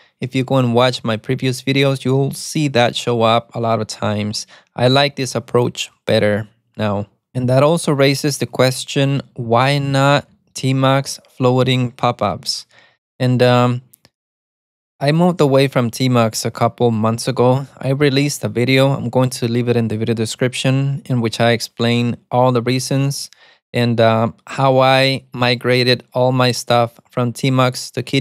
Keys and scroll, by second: 9.8-11.6 typing, 18.7-20.4 typing.